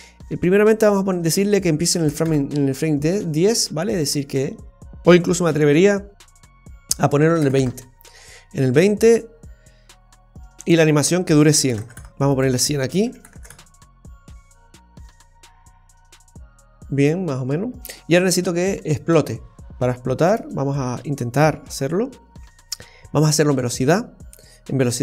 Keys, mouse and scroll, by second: 0.7 click, 10.6 click, 11.8 KP_0, 12.3 click, 13.3 KP_0, 20.2-20.5 scroll up 1, 21.1-21.7 scroll up 6, 21.7-22.2 scroll down 1, 22.5-23.0 scroll down 1, 23.8 click, 24.4-24.9 scroll down 2.